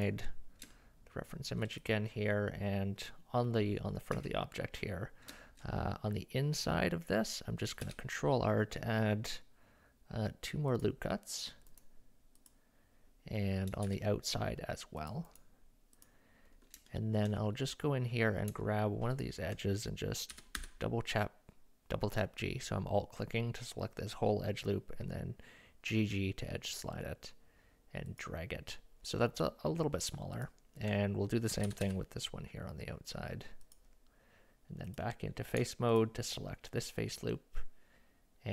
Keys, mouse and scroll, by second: 0.7 shift+middle click, 1.9 click, 4.1 Tab, 5.4 shift+middle click, 7.8 ctrl+r, 12.4 click, 13.9 ctrl+r, 16.9 shift+middle click, 19.2 alt+click, 20.3 g, 30.4 alt+click, 31.7 g.